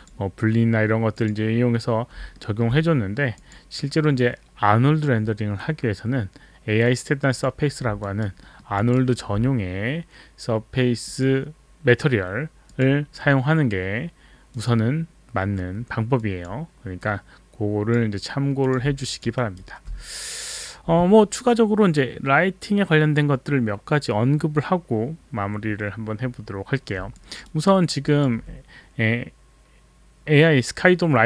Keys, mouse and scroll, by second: 1.2 click, 2.4 alt+middle click, 3.3 click, 7.3 click, 8.0 alt+right click, 8.5 alt+middle click, 8.5 alt+right click, 8.8 alt+click, 8.9 alt+right click, 11.1 click, 12.7 click, 14.5 click, 16.2 click, 17.0 click, 18.6 click, 19.0 alt+click, 19.4 alt+right click, 27.5 alt+right click, 28.0 alt+click.